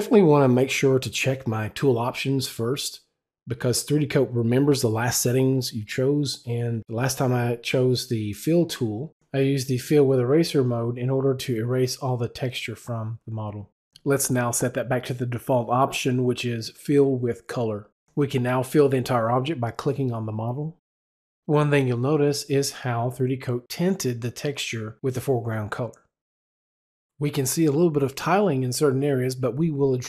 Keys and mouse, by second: 14.3 click, 18.4 click.